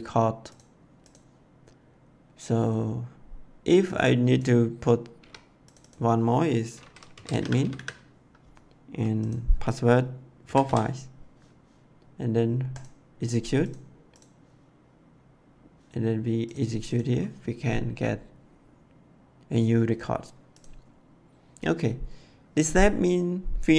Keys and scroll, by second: 5.1 2, 7.1-7.7 typing, 10.4 4, 10.6 5.